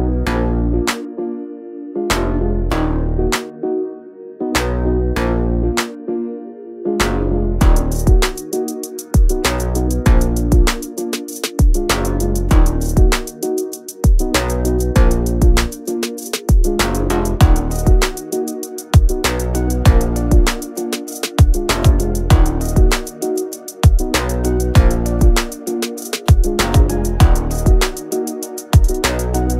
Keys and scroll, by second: 0.7-3.1 typing, 4.7 space, 5.8 m, 6.4 Up, 8.1 4, 8.4 Return, 8.7 space, 9.4 p, 10.4 3, 10.7 Return, 10.9 space, 14.6 r, 16.7 Escape, 24.3 space, 25.3 Delete, 26.9 p.